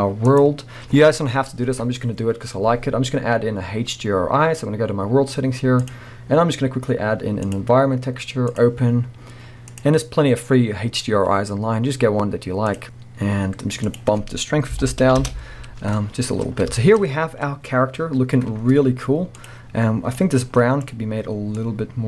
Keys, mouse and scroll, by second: 7.6-9.8 drag, 10.4-16.8 drag, 15.7 Return, 16.4-16.8 scroll down 1, 16.8-19.5 shift+middle drag, 17.0-18.8 scroll up 1, 19.5 click.